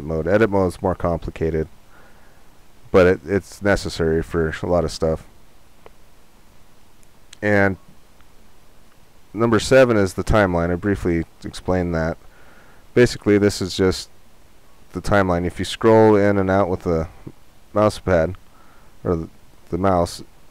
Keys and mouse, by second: 9.3 click.